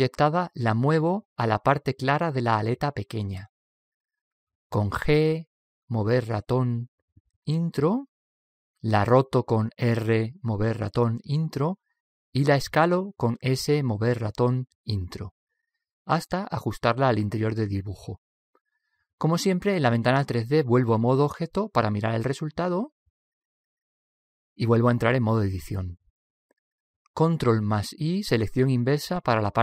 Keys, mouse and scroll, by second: 2.4 g, 2.5 Return, 9.2 Return, 9.8 r, 13.5 Return, 13.7 s, 20.6 Tab, 21.4-23.3 middle drag, 24.1-25.9 middle drag, 26.3 Tab, 27.4 ctrl+i, 29.2 ctrl+i.